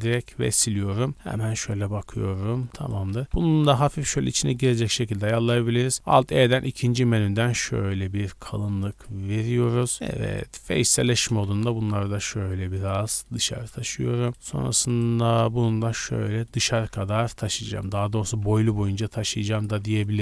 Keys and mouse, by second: 0.0-1.1 typing, 3.2 g, 5.6 alt+middle click, 5.9 alt+e, 6.4-9.2 shift+middle drag, 10.9 shift+click, 11.4 g, 13.0-14.3 middle drag, 14.5 shift+middle click, 14.9 shift+click, 15.4-17.6 middle drag, 17.8 middle click, 18.2 g, 20.0-20.2 shift+middle drag.